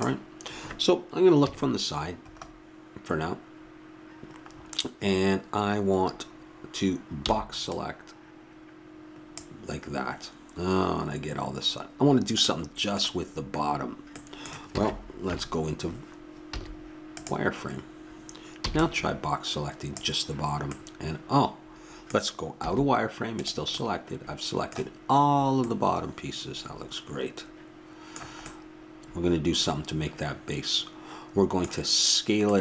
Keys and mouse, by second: 1.4 KP_3, 7.2 b, 12.8-14.7 middle drag, 14.7 a, 15.2 KP_3, 16.6 z, 18.7 b, 22.6 z, 25.5-27.7 middle drag.